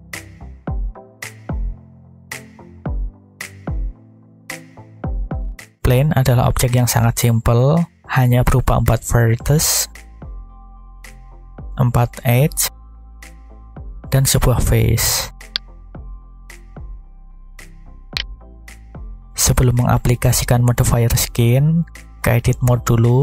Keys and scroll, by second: 0.7 z, 2.4 4, 2.6 5, 3.4 Return.